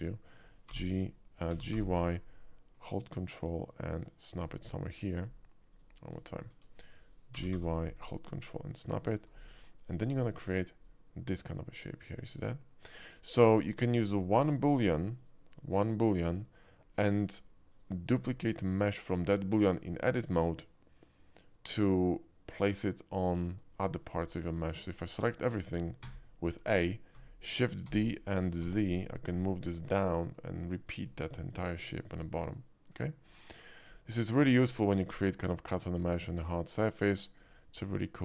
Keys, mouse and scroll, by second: 0.7 y, 1.5 g, 1.7 y, 1.9 g, 4.2 ctrl+click, 4.5 ctrl+middle click, 5.7 ctrl+click, 6.2 alt+middle click, 6.4 alt+middle click, 7.2 g, 7.5 y, 7.6 g, 9.0 click, 9.3 middle click, 9.6 middle click, 10.2 ctrl+middle click, 10.4 Tab, 10.8-13.3 middle drag, 14.1-14.6 middle drag, 15.2 click, 16.5-16.9 middle drag, 17.7 click, 18.4 middle click, 23.5-24.0 middle drag, 24.4 middle click, 24.7 Tab, 25.4 middle click, 26.0 a, 27.9 shift+d, 29.0 shift+z, 30.8 shift+click, 31.3 shift+middle click, 32.0 Tab, 32.7-34.3 middle drag, 37.9-38.2 middle drag.